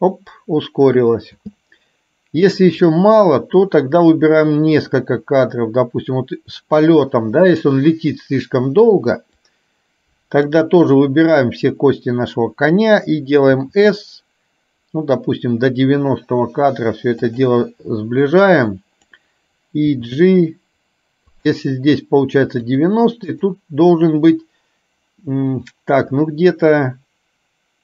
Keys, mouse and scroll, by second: 1.4 space, 2.9-4.3 drag, 4.8 click, 7.6 click, 9.7-10.6 drag, 18.3 click, 22.7 click, 23.3 click.